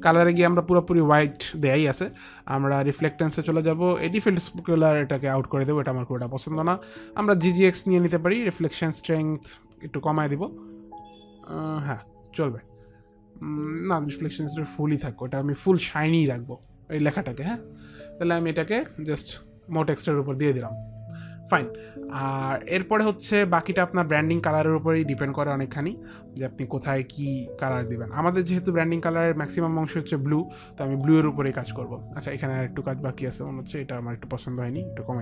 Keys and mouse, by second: 4.1 click, 5.1 Delete, 5.9 click, 8.4 Delete, 9.3 click, 10.8 click, 14.3 click, 16.3 click, 18.4 click, 18.5 click, 23.7 alt+click, 33.3 click.